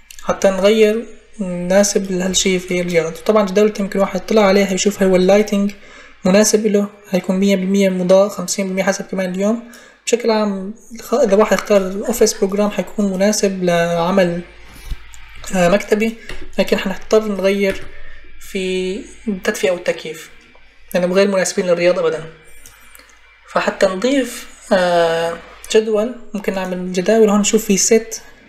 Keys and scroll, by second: 16.1 Delete, 17.5 Delete.